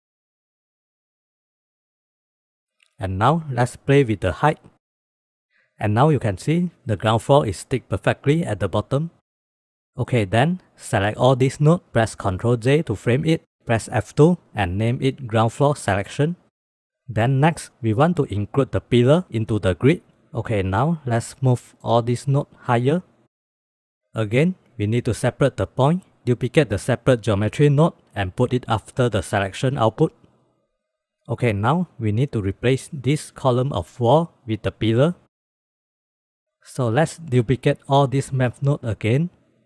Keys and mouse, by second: 0.8-2.6 drag, 4.6 click, 5.0 click, 5.2 click, 6.3 click, 6.9 click, 7.2 click, 7.8 click, 8.8 click, 9.7 click, 10.7-11.7 drag, 12.3 ctrl+j, 13.4 F2, 15.4 o, 20.9 click, 21.1-21.8 drag, 21.8 click, 22.5 g, 24.5 drag, 25.5 drag, 26.2 click, 27.0 shift+d, 29.2 drag, 29.7 drag, 30.6 click, 35.9 click, 36.4 click, 37.1 click, 38.6 drag, 39.2 shift+d.